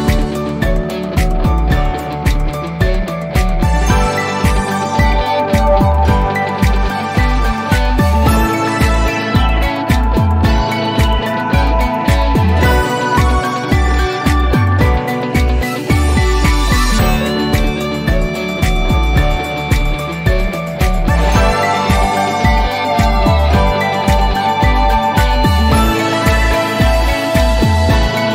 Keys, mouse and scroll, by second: 1.3 scroll up 1, 1.3-3.3 drag, 3.7-4.7 alt+middle click, 4.7-6.1 scroll down 2, 6.1-6.5 scroll down 1, 6.7 click, 9.4 1, 9.9 Return, 10.5-12.0 scroll up 1, 12.1-15.7 drag, 20.7 0, 21.6 Return, 23.3 click, 26.4-27.9 alt+middle drag.